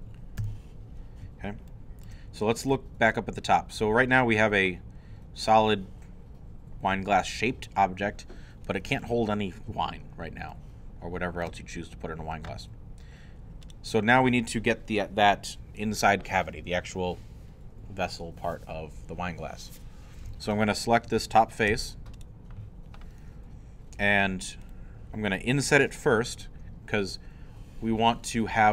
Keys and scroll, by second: 0.0 3, 0.6 i, 1.2 shift+i, 21.7 3.